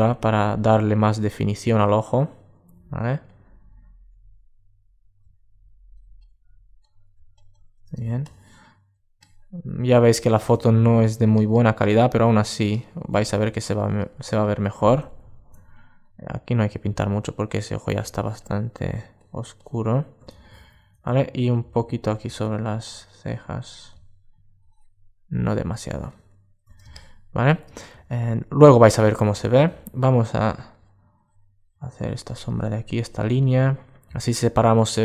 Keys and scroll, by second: 14.7 alt+super+z, 20.1 super+1, 21.9 super+space, 25.6 alt+space, 27.7 super+space.